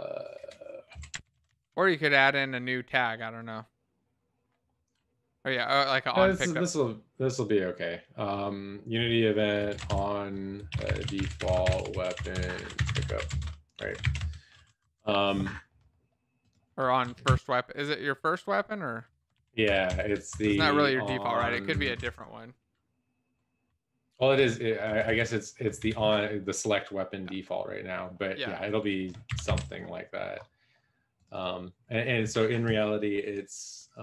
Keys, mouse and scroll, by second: 0.6-2.0 typing, 2.5 ctrl+s, 9.7-13.8 typing, 14.1 ctrl+s, 14.1 Left, 14.8 Right, 17.9 ctrl+., 17.9 Up, 18.1 Up, 18.2 Up, 18.3 Up, 18.5 Up, 19.6 ctrl+s, 19.6 End, 19.8 Left, 20.1 Left, 20.2 Left, 21.3 shift+Right, 21.6 shift+Left, 21.9 shift+Right, 25.0 Down, 25.7 Escape, 29.7 ctrl+s.